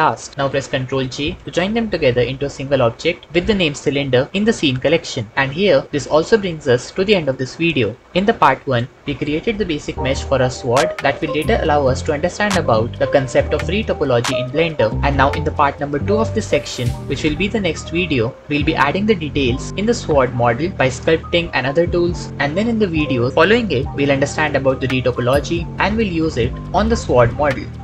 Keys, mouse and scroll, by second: 0.9 ctrl+j, 7.0 middle drag, 15.8 ctrl+z, 17.6 KP_1, 18.4 ctrl+s, 21.5 ctrl+s, 23.9 ctrl+Tab, 24.7 KP_1, 24.8 KP_1, 25.4 click, 26.8 click.